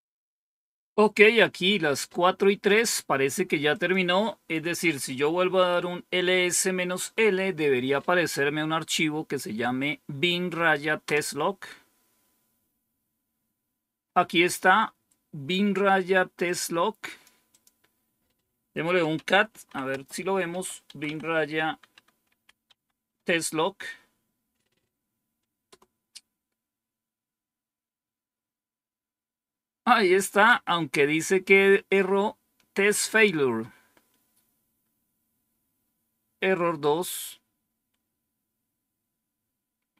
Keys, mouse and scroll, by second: 3.6 click, 4.7 Up, 4.9 Up, 10.9 Return, 16.3 click, 17.4 click, 18.8-22.6 typing, 25.6 Return.